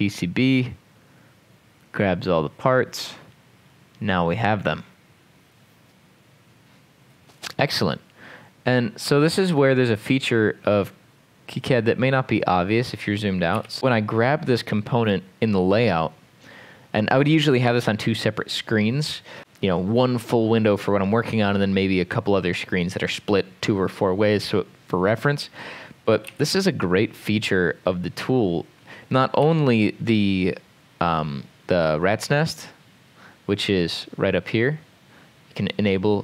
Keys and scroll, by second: 13.3-14.3 typing, 26.3 m, 29.4 r.